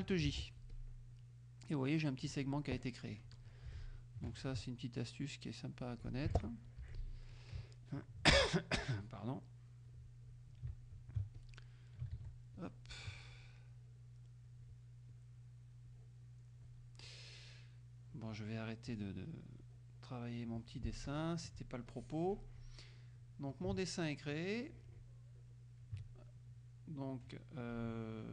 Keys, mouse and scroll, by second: 0.3 alt+j, 0.8 alt+click, 2.4 click, 3.7 Delete, 4.5 ctrl+click, 5.3 click, 6.9 Delete, 7.9 ctrl+click, 9.0-10.1 drag, 10.9 ctrl+alt+click, 11.4 ctrl+alt+click, 12.2 ctrl+z, 12.6 ctrl+click, 13.8 click, 15.2 click, 15.9 click, 18.2 click, 18.9 click, 19.6 click, 21.1 F1, 22.0 click, 23.1 middle click, 24.4-26.0 ctrl+drag, 26.1 ctrl+middle click, 27.3 click.